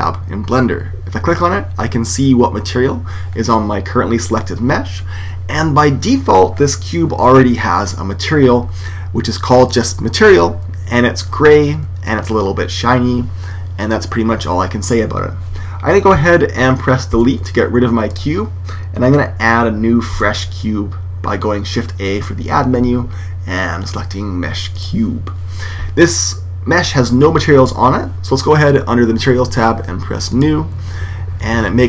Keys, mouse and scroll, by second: 17.1 x, 20.1 shift+a, 30.2 click.